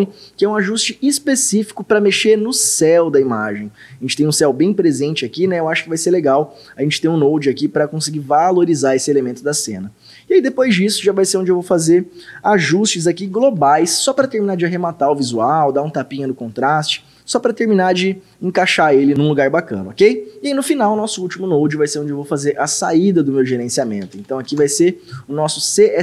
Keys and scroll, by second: 1.9-2.8 typing, 13.0-14.5 typing, 23.3-24.9 typing.